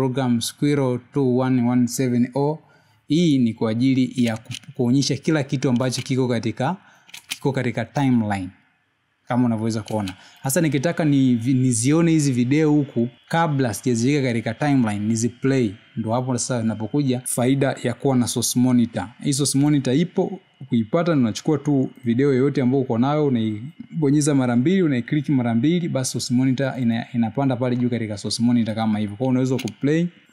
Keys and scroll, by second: 7.7 space, 9.1 space, 10.5 space, 13.0 space.